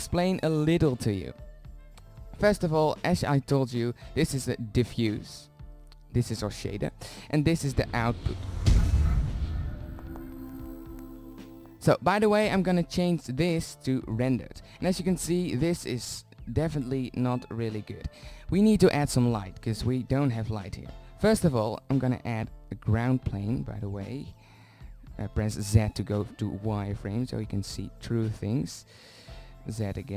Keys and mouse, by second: 3.8-6.7 drag, 7.5-8.6 drag, 18.7 z, 23.5 z, 25.9 z, 28.5 z, 29.5 s.